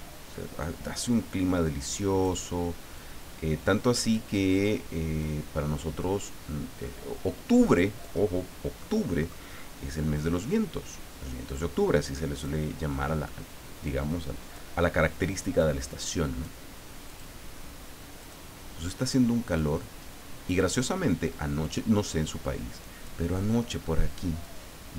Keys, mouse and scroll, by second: 0.6-2.2 drag, 3.0-4.3 drag, 5.2-8.1 drag, 8.8 middle click, 10.4-12.6 drag, 13.8 click, 15.5 click, 17.0 click, 18.2 click, 19.5-20.9 drag, 21.6 click, 22.0-23.2 drag, 24.4-24.9 drag.